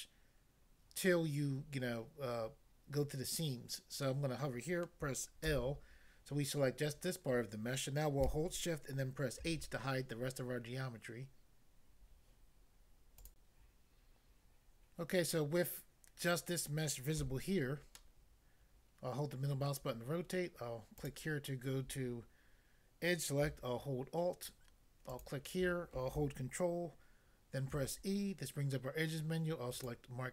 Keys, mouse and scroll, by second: 5.5 l, 9.4 h, 13.3 click, 17.2 a, 18.0 middle click, 19.7 middle click, 21.0 click, 21.1 click, 25.1 alt+click, 27.8 ctrl+e, 29.8 click, 29.9 click.